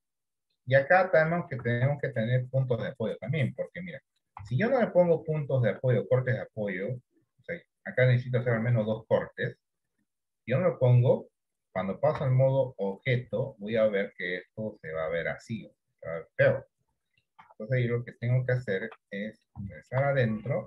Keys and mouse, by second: 0.3 click, 1.1 middle click, 1.7 Tab, 2.2-3.2 middle drag, 3.5 middle click, 4.6 Tab, 4.9 middle click, 5.6 shift+middle click, 6.5 middle click, 12.3 Tab, 13.6 shift+middle click, 14.6-17.4 middle drag, 17.5 Tab, 18.0 middle click, 19.0 Tab, 19.4 middle click, 19.9 shift+middle click.